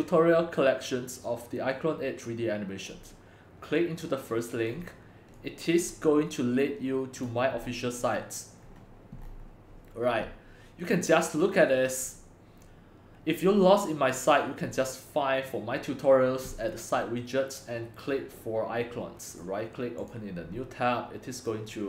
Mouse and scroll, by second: 2.4-5.4 drag, 5.4-8.6 drag, 8.6-8.9 scroll down 3, 8.9-12.5 scroll, 9.2-9.9 middle drag, 10.0-15.2 middle drag, 19.4-20.1 right drag, 20.1-21.8 drag.